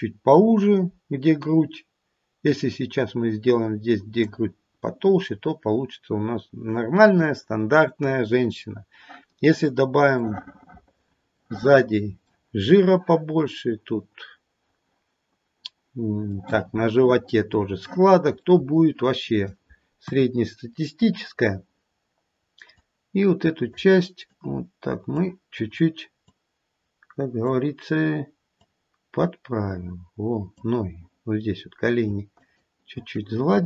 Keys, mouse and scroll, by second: 2.4 click, 4.6-5.5 scroll down 1, 5.5 scroll down 1, 5.7-7.7 scroll up 2, 10.8 middle click, 11.4 middle click, 11.9 middle click, 12.1 middle click, 16.3 middle click, 16.9 middle click, 18.4 middle click, 18.8 middle click, 20.0 KP_1, 20.6-21.2 scroll down 1, 22.7 click, 24.3 click, 26.2 click, 28.5 click, 31.6-32.0 scroll up 3, 32.4 shift+click.